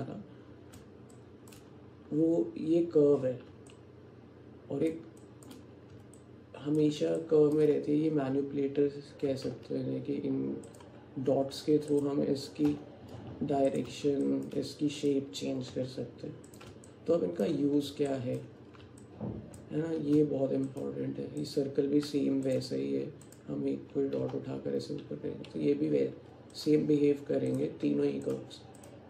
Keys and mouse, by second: 1.2 alt+shift+click, 3.8-5.5 drag, 6.2 alt+click, 7.2 shift+click, 9.3 g, 11.9 click, 12.7 g, 14.3 shift+click, 15.1 click, 16.9 alt+click, 18.2 click, 19.0 middle click, 19.2 alt+click, 19.6 middle click, 20.2 Tab, 23.3 click, 24.3 g, 27.6 click, 27.9 Tab.